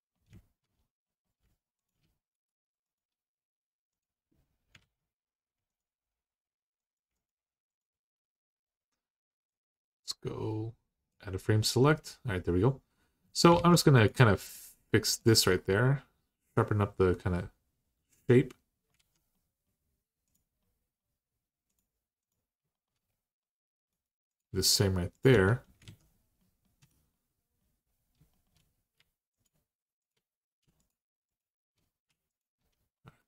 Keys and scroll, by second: 4.6 alt+z, 13.3 alt+z, 18.7 alt+z, 25.1 Tab, 25.6 alt+z, 26.6 Tab.